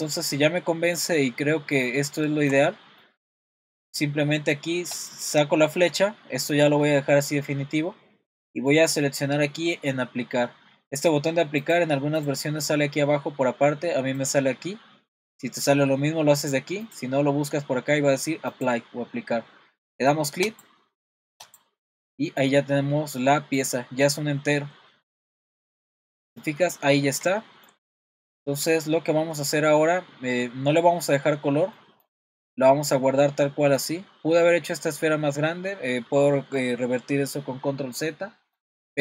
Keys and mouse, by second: 1.2-1.8 middle drag, 2.2 shift+middle click, 3.0 middle click, 4.9-11.0 drag, 11.8 click, 14.2-17.0 drag, 18.5-20.7 drag, 22.1-22.4 middle drag, 23.6 click, 24.6-25.3 middle drag, 26.1 middle click, 27.4 shift+middle drag, 28.4 middle click, 29.8-31.0 middle drag, 31.8-32.2 middle drag, 33.0-33.8 middle drag, 38.6-39.0 middle drag.